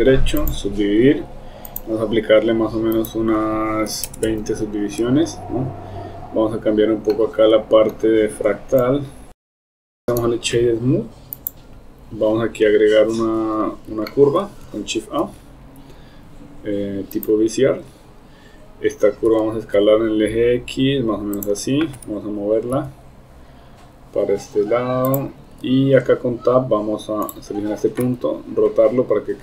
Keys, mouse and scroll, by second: 1.8 click, 3.0 click, 7.1 middle click, 7.1 scroll up 1, 8.8 click, 9.8 click, 10.0 Tab, 10.0 KP_7, 10.3 right click, 14.1-14.5 shift+middle drag, 15.2 shift+a, 19.3 s, 22.0 g, 28.1 r.